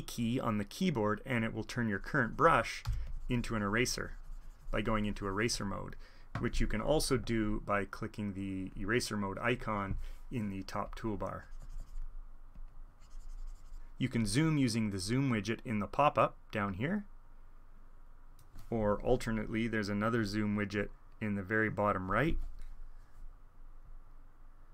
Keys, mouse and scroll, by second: 1.7-3.0 drag, 2.9 e, 3.0-4.4 middle drag, 4.4-5.9 drag, 7.2 alt+e, 7.7-8.9 middle drag, 8.9-10.3 drag, 9.6 alt+e, 10.8 click, 11.3 click, 12.5-15.7 drag, 16.1 click, 16.3 middle click, 16.5 middle click, 17.4 click, 20.0 alt+e, 20.7-22.1 drag, 22.3 alt+e.